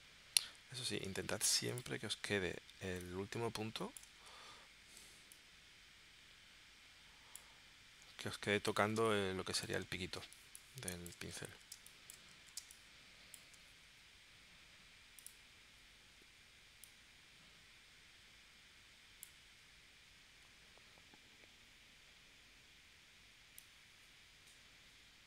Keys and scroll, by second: 4.2 super+z, 9.0 space, 10.2 space, 11.7 space, 12.5 space.